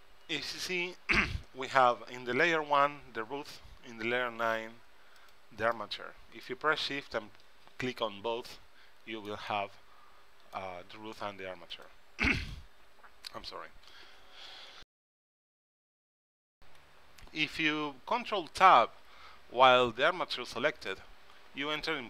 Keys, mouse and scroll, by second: 5.3-7.0 drag, 5.9-7.7 middle drag, 5.9-7.0 right drag, 8.7-11.3 middle drag, 11.9-14.3 drag, 21.1 ctrl+Tab.